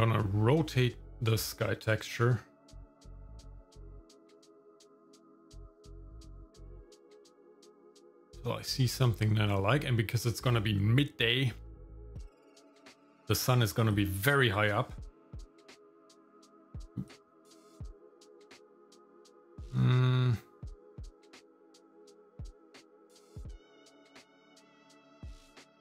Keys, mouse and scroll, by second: 0.0 middle click, 0.5-0.8 scroll down 1, 0.8 middle click, 3.4-9.0 drag, 13.9-16.1 drag, 17.1-22.1 drag, 22.7-25.8 drag.